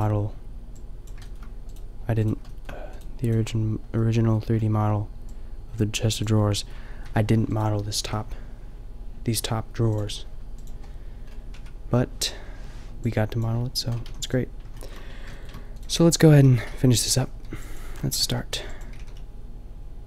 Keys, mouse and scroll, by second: 3.7-7.0 drag, 7.0 Tab, 8.0 a, 11.6 Tab, 14.1 a, 16.0 Tab, 16.3 a, 17.3 b, 18.5 b, 18.9 g.